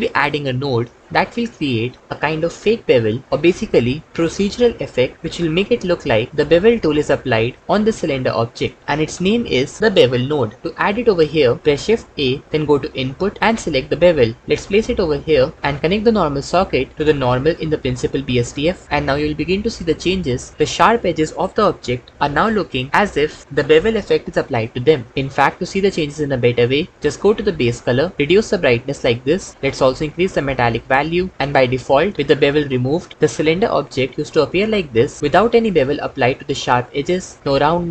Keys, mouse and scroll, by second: 12.1 shift+a, 27.4 click, 30.6 click.